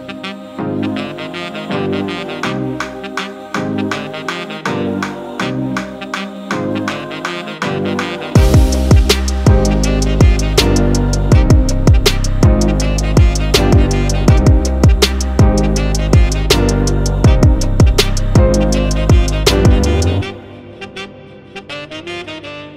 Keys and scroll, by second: 2.9 super+1, 3.7 super+j, 4.2 BackSpace, 4.5 super+t, 4.9 Return, 4.9 super+t, 6.4 super+0, 6.5 super+-, 7.1 Return, 7.2 super+1, 7.3 i, 8.0 space, 8.1 shift+b, 8.9 super+s, 9.8-14.1 typing, 14.3 super+z, 17.0 super+z, 17.5 super+0, 17.6 super+=, 17.9 super+z, 18.6-19.7 typing, 19.6 super+d, 19.9 super+0, 20.2 super+1, 21.0-22.4 typing.